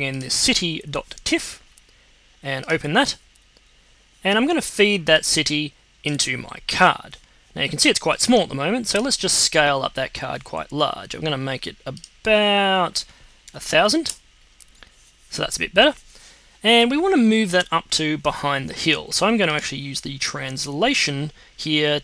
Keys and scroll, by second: 13.4 0, 14.0 Return.